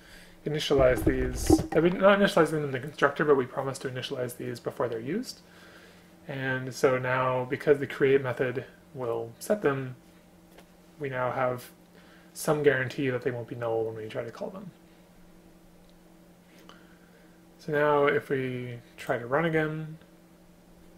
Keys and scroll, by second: 1.5 space.